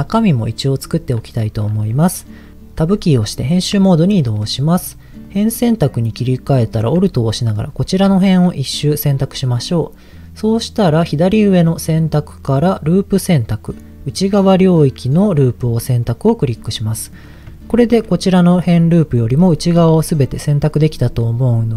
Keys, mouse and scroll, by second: 0.0 middle click, 1.2 middle click, 2.5 click, 3.0 Tab, 3.8 shift+middle click, 5.2 click, 6.3 alt+click, 7.3 middle click, 7.6-8.0 scroll up 3, 8.2 shift+middle click, 11.6-16.1 drag, 16.3-16.7 scroll down 2, 16.7 middle click, 17.7 shift+middle click, 19.4-21.1 middle drag.